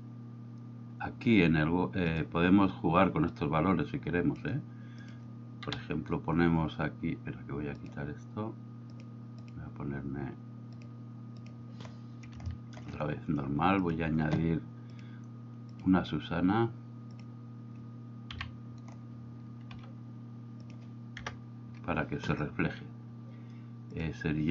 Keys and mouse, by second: 2.2 drag, 5.1 click, 5.8 KP_7, 7.8 drag, 9.5 click, 11.4 click, 12.6 shift+middle drag, 13.9 click, 15.1-17.3 drag, 18.4 KP_3, 19.8 g, 20.7 click, 21.3 KP_0, 24.0 drag.